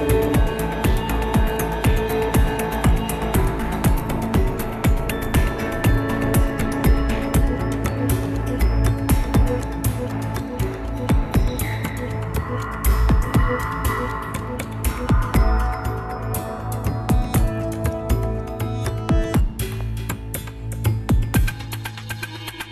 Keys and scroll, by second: 3.2 ctrl+v, 3.4 Tab, 5.9 ctrl+v, 6.2 Tab.